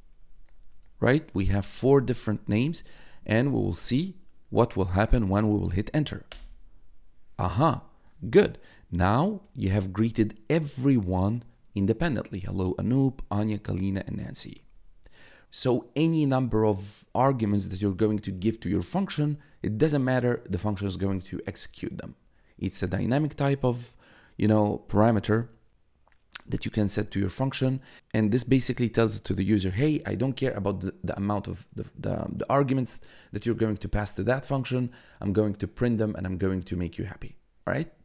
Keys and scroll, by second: 0.4 shift+', 1.0 shift+n, 1.3 a, 2.3 shift+', 2.9 shift+0, 6.2 Return, 9.6 1, 15.1 1.